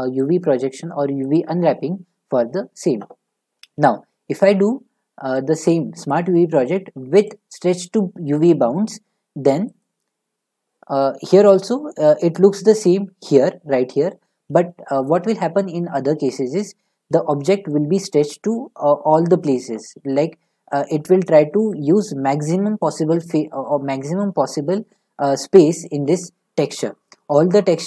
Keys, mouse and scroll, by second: 1.2 click, 3.8 u, 6.1 click, 7.3 click, 12.8 click.